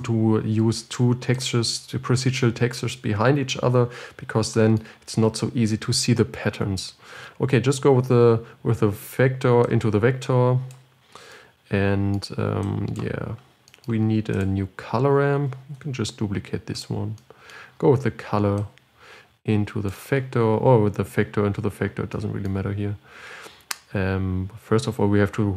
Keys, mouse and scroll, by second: 13.0-16.2 drag, 16.2 shift+d, 18.9-20.2 drag.